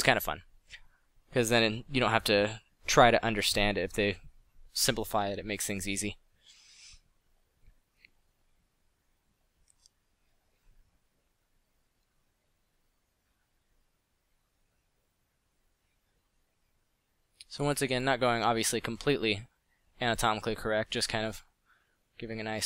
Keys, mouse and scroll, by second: 1.0 f, 10.0 f, 12.5 f, 15.4 f.